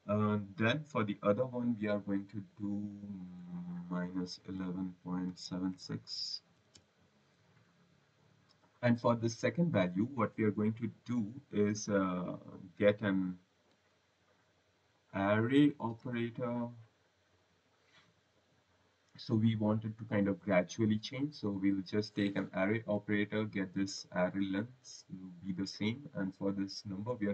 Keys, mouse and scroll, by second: 2.4 click, 2.8 click, 4.0 typing, 5.2-6.9 typing, 8.0 click, 14.0 Tab, 19.9 typing, 21.2 click, 22.1 click, 23.4 click, 25.8 click.